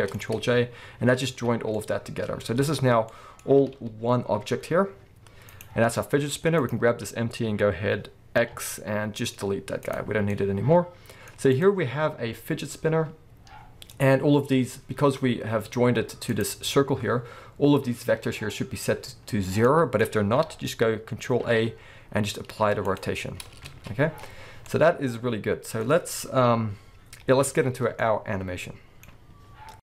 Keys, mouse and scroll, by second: 1.3 alt+a, 1.5 scroll down 2, 2.7 Tab, 3.6 r, 5.6 right click, 6.6 click, 8.5 x, 10.3-11.5 middle drag, 11.5 click, 15.0-16.3 scroll up 1, 16.3 click, 19.6-23.0 middle drag, 21.5 ctrl+a, 23.3 scroll down 1, 23.7 alt+a, 23.7-29.9 middle drag.